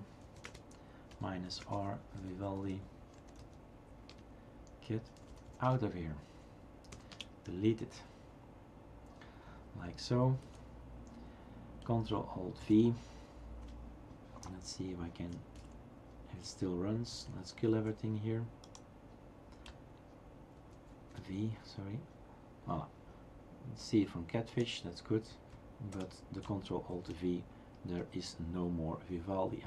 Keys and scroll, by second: 0.0-3.6 typing, 4.1 Return, 4.8-6.9 typing, 7.1 Return, 10.5 shift+super+q, 12.6 ctrl+alt+v, 15.6 shift+super+q, 17.1 shift+super+q, 17.7 shift+super+q, 20.8 ctrl+alt+c, 20.9 ctrl+alt+v.